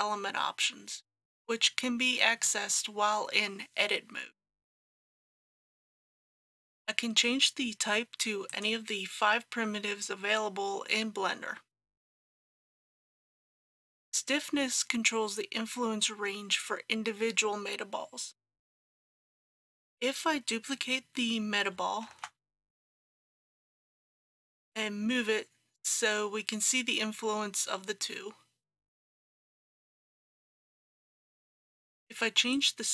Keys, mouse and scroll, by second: 6.3 click, 19.1 KP_2, 22.1 shift+d, 24.4 g, 30.4-32.9 drag.